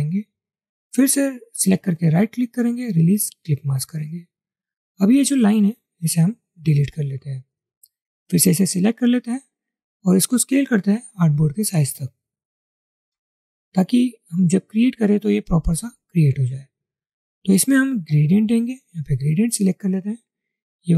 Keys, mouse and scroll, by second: 2.1 right click, 6.6 Delete, 10.7 alt+shift+click.